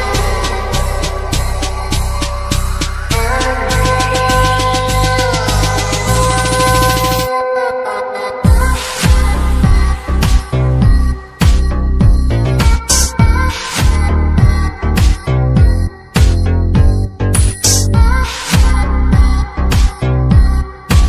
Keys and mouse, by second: 0.0-0.8 typing, 14.7 space.